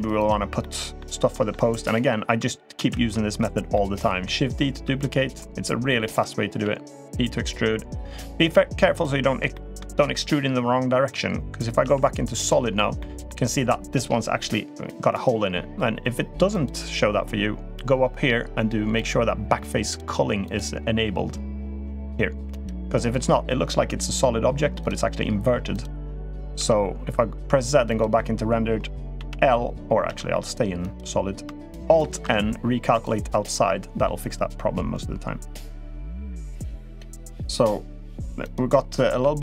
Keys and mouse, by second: 0.4 middle click, 1.1 middle click, 1.6 click, 2.5 shift+d, 3.5 middle click, 4.6 s, 6.4 e, 9.3 shift+middle drag, 11.6 z, 12.7 middle click, 16.4-17.9 drag, 18.7 click, 20.2-24.8 drag, 25.5 click, 26.3 z, 28.9 l, 29.8 z, 31.8 alt+n, 35.6 click, 36.1 g, 38.2 click, 38.9 l.